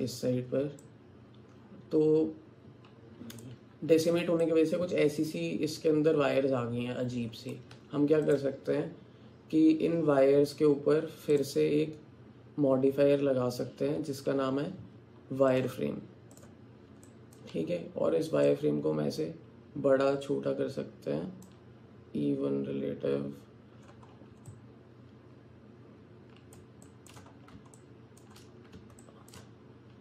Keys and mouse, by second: 0.8-3.5 drag, 4.5-7.6 drag, 7.8 Tab, 11.4-14.3 drag, 15.7 click, 17.1 alt+click, 18.6-21.6 drag, 24.5-26.6 alt+drag, 26.9 alt+shift+click, 27.1 alt+middle click, 27.8 alt+shift+middle click, 29.0 shift+middle click.